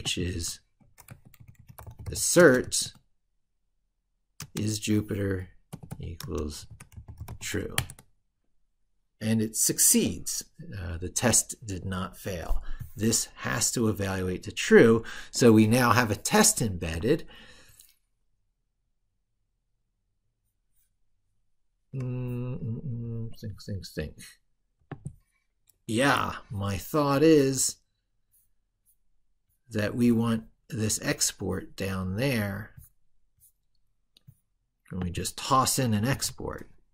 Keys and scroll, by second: 2.4 ctrl+v.